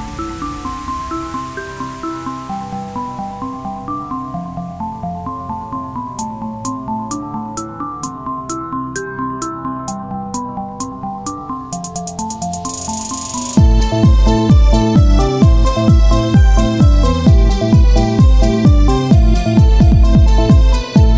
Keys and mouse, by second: 0.8-2.8 right drag, 1.0 z, 1.6 c, 2.8-5.2 drag, 5.8 r, 7.4-12.3 drag, 7.5 c, 10.2-11.9 right drag, 10.4 c, 12.0 z, 12.3 Tab, 15.3 KP_1, 15.5 KP_3, 16.1 Tab, 18.2 z, 18.5 c, 20.3-21.1 drag, 20.3 z.